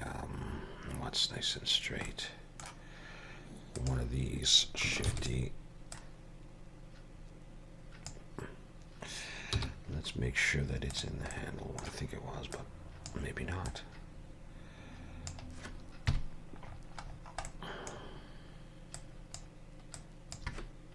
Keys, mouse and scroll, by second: 0.7-1.9 scroll down 2, 2.1 middle click, 3.8 click, 5.1 shift+d, 6.0 click, 9.6 m, 11.4 middle click, 12.6 click, 13.7 click, 16.1 KP_Decimal, 16.7-17.5 scroll down 10, 17.5 middle click, 18.0 scroll down 2, 19.0 click, 20.0 click.